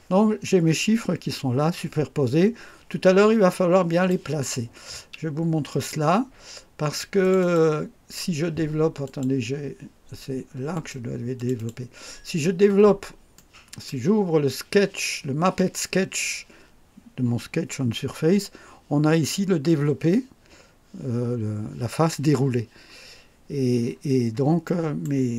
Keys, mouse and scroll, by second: 2.6-3.2 scroll down 4, 3.5-4.3 right drag, 5.7 click, 7.2 click, 9.0 click, 10.7 click, 11.3 click, 12.6-13.0 scroll down 1, 13.3 right click, 23.8-24.1 scroll up 1, 24.6 right click.